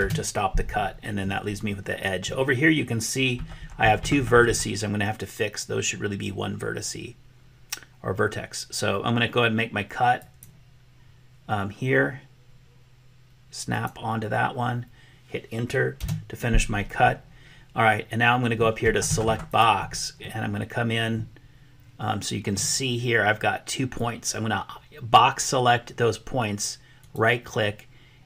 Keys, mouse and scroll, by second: 10.2-16.7 drag, 19.6 click, 20.2-22.6 middle drag, 23.9-25.3 drag, 27.1-28.2 drag.